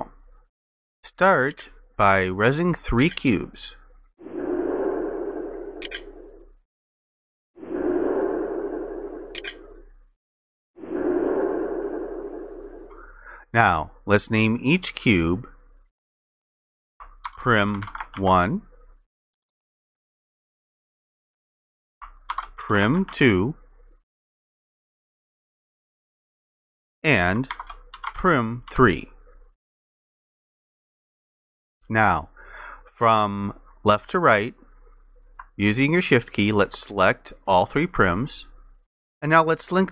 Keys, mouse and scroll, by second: 17.0-18.7 typing, 22.1-23.7 typing, 27.3-28.7 typing, 36.8 shift+click.